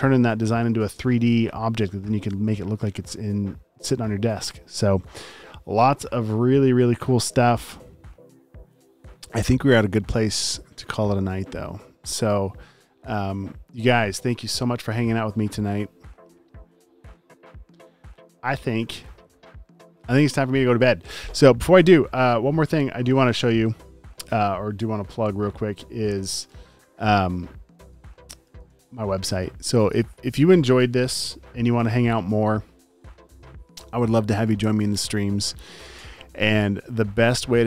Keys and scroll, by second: 28.6 super+t.